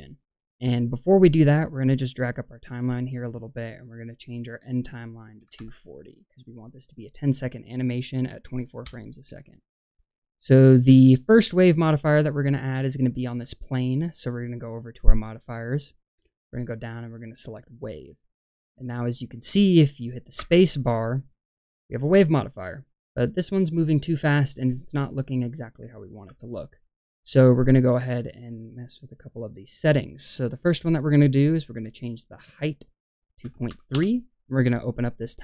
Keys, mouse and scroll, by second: 1.6-3.0 drag, 3.7-8.8 drag, 11.5-12.0 middle drag, 14.9 click, 16.0-18.0 drag, 18.7 middle click, 20.3 space, 26.2 space, 30.9-33.9 drag, 35.2 click.